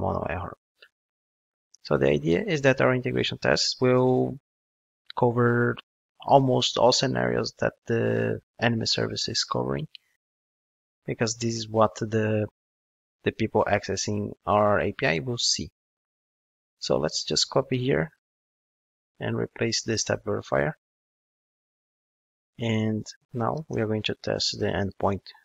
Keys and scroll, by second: 0.3 ctrl+Tab, 2.0 ctrl+Tab, 2.1 super+v, 17.8 super+c, 21.1 super+v.